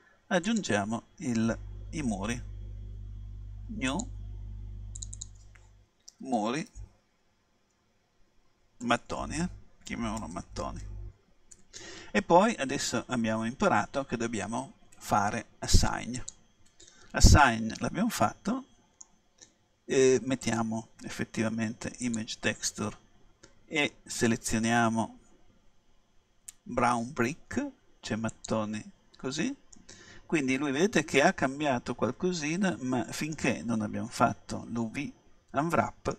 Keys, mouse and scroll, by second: 0.5-2.4 drag, 4.0-7.2 drag, 9.1 BackSpace, 9.2 BackSpace, 10.4 t, 16.2-18.0 drag, 17.5 middle click, 18.0 click, 18.2-19.2 middle drag, 20.5-22.4 drag, 24.2-26.2 drag, 29.8-31.8 middle drag, 34.3-36.1 middle drag.